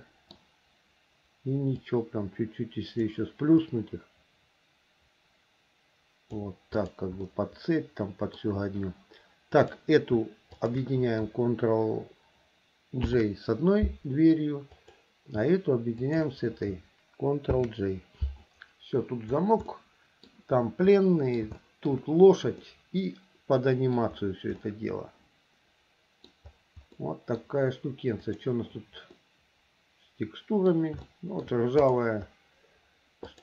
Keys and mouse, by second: 2.0-3.3 drag, 3.8-6.6 drag, 7.0 click, 7.4-8.5 middle drag, 9.7 click, 10.7 shift+click, 13.2 ctrl+j, 14.9 click, 16.2 shift+click, 17.7 ctrl+j, 19.9 click, 20.0 middle click, 21.1 middle click, 21.8 shift+middle click, 22.8-24.2 middle drag, 24.8-26.5 middle drag, 27.2 middle click, 29.4 click, 29.5-30.9 middle drag, 31.2 shift+middle click.